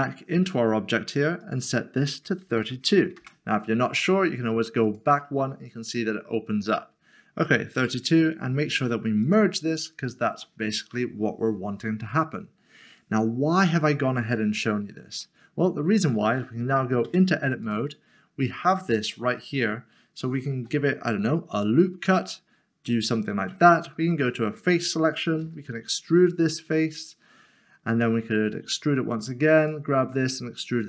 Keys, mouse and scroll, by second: 2.4 typing, 3.2 Return, 4.9 click, 7.7 click, 15.2 middle click, 17.0 Tab, 17.6 Tab, 20.2 click, 20.5 ctrl+r, 21.5 click, 24.0 3, 25.6 e, 27.9 click, 28.5 e, 29.2 click, 29.6 double click, 30.0 e.